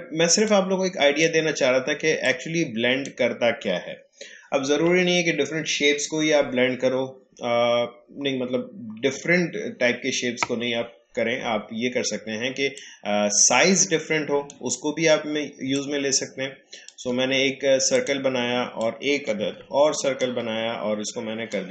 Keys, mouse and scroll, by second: 0.4-4.7 drag, 4.7 Delete, 12.7-21.4 drag, 21.4-21.7 alt+shift+drag.